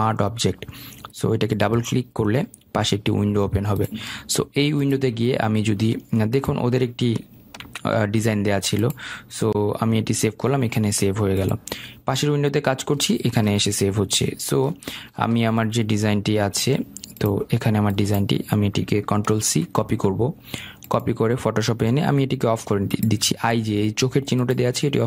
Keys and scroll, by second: 8.6 ctrl+s, 20.4 ctrl+c.